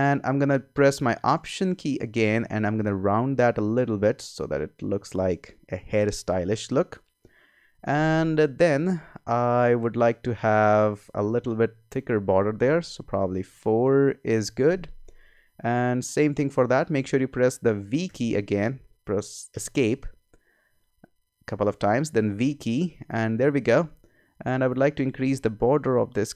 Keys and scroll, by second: 16.1 v, 18.1 v, 19.5 Escape, 20.6 Escape, 22.2 v, 25.7 Up.